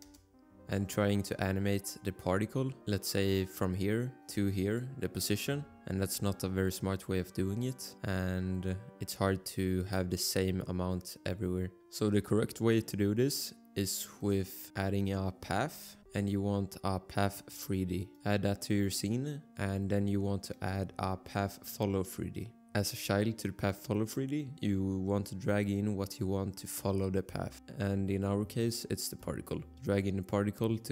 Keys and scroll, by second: 0.0 Return, 5.8 ctrl+z, 15.6 h, 16.2 h.